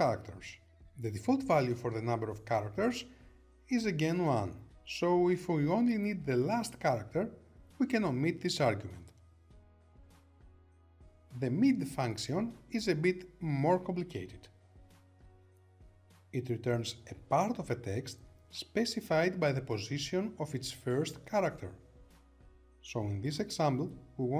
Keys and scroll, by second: 3.3 Return.